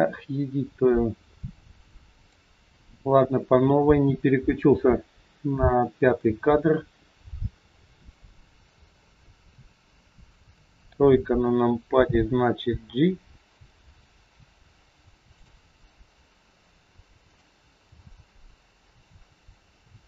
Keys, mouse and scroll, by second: 2.2 click, 6.3-6.8 scroll up 2, 7.7 middle click, 10.4 KP_3, 11.0-11.4 scroll down 2, 12.7 g, 17.3 click, 17.8 g.